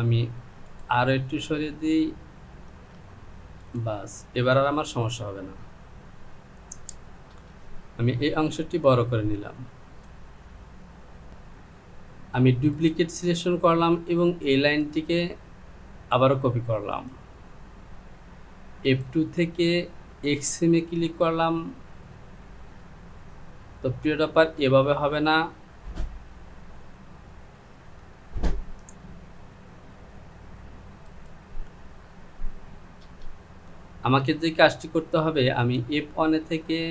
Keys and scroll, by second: 1.4 Down, 5.9 Home, 28.0 j, 33.3 Return.